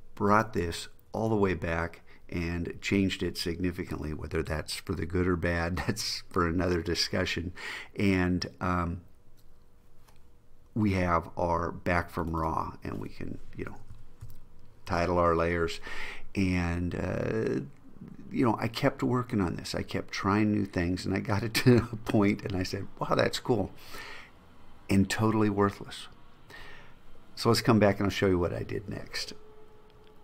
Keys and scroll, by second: 13.8 shift+r.